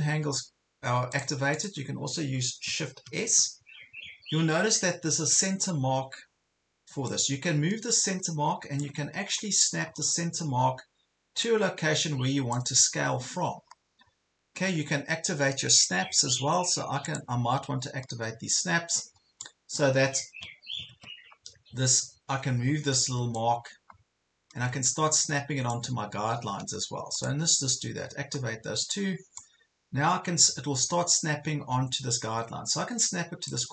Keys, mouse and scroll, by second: 1.1 click, 3.1 shift+s, 7.2-9.0 drag, 9.3 ctrl+scroll up 1, 11.5 click, 17.1 click, 20.9 ctrl+z, 23.3-33.7 drag.